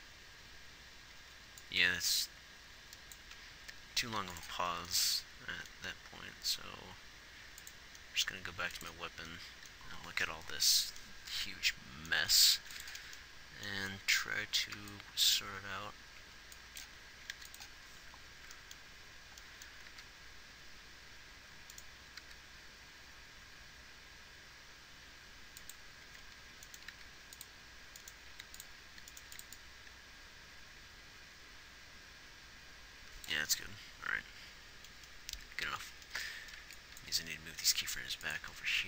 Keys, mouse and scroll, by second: 0.0 alt+a, 1.6 alt+a, 2.4-4.5 drag, 4.5 ctrl+s, 8.9 ctrl+s, 12.9 ctrl+s, 14.3 a, 14.6 a, 15.2 b, 16.6 b, 20.3 g, 22.5 g, 27.3 g, 29.6 x, 36.7 a, 37.0 b, 38.2 g.